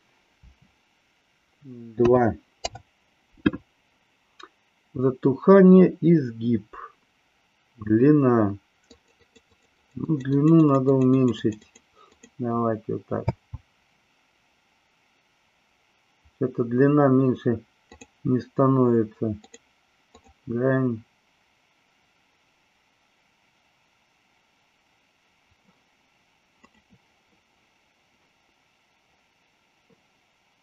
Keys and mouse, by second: 8.9 click, 9.5-11.0 drag, 11.1 click, 12.2 click, 13.2 space, 17.9 click, 19.3 click, 20.1 click, 26.6 click.